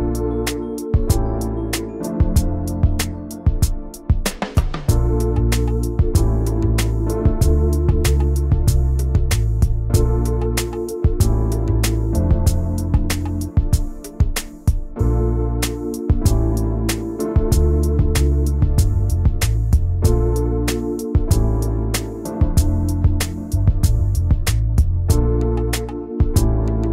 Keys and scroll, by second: 16.0 ctrl+z, 16.8 i, 17.2 v, 21.5 m, 22.5 Return, 23.3 v, 24.5 v, 24.9 ctrl+shift+[.